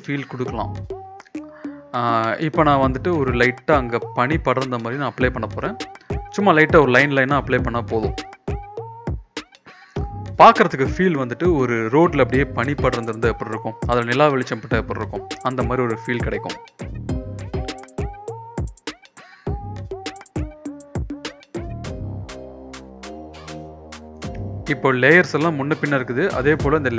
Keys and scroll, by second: 2.1-4.0 typing, 5.0-6.8 typing, 12.7-16.1 typing, 17.6-21.3 typing, 23.4 ctrl+b.